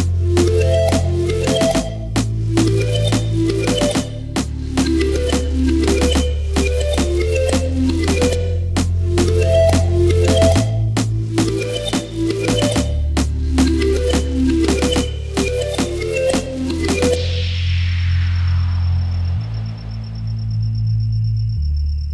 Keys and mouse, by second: 1.2 KP_1, 1.3 KP_3, 2.3 shift+d, 4.9-22.1 middle drag, 5.5 shift+d, 11.4 s, 13.7 g, 19.6 click, 19.9 s, 20.6 s.